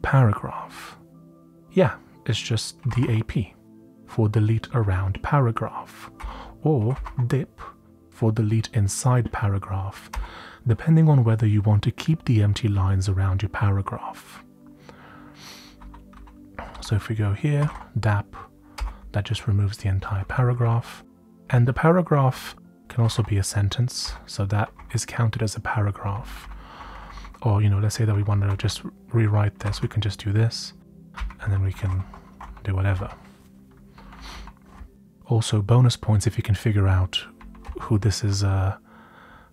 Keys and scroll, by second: 2.5-3.5 typing, 6.1-7.5 typing, 10.1 typing, 15.5-21.1 typing, 21.4 Down, 21.9 Down, 22.0 Down, 22.1 Down, 22.2 Down, 22.7-24.3 typing, 24.7 Down, 25.8-26.9 typing, 27.0 Down, 27.3 Down, 28.1 Right, 28.8 Left, 29.3-32.9 typing, 34.0 Up, 34.1 Up, 34.3 Up, 35.2 Down, 37.3 Up, 38.3 Up, 38.7 Up, 38.9 Up.